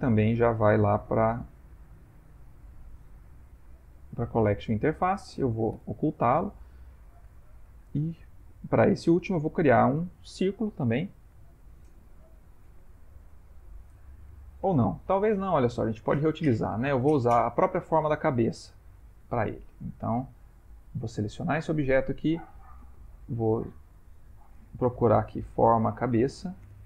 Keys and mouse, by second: 0.3 m, 5.8 h, 6.2 middle click, 6.4 middle click, 6.7 ctrl+middle click, 6.9 ctrl+middle click, 7.4 shift+middle click, 7.7 shift+middle click, 7.8 ctrl+middle click, 11.4 shift+middle click, 15.5 ctrl+z, 17.6 ctrl+middle click, 17.7 ctrl+middle click, 19.1 middle click, 19.6 middle click, 20.0 ctrl+middle click, 20.1 ctrl+middle click, 20.4 ctrl+middle click, 21.1 click, 23.5 click.